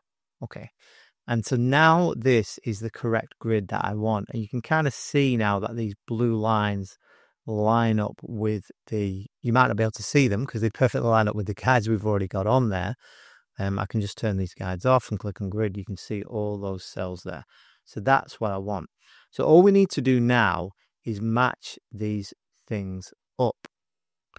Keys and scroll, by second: 13.7 shift+g, 17.6 shift+g, 19.5 super+-, 20.2 space, 20.7 space, 20.8 space.